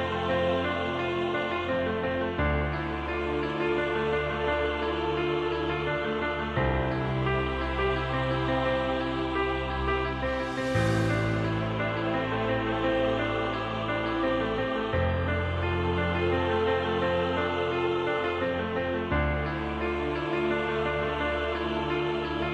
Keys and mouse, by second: 0.7 shift+middle click, 1.5 middle click, 8.2 middle click, 9.5-10.8 middle drag, 12.3 ctrl+r, 17.3 3, 18.0 click, 19.5 shift+middle click, 21.8 shift+click.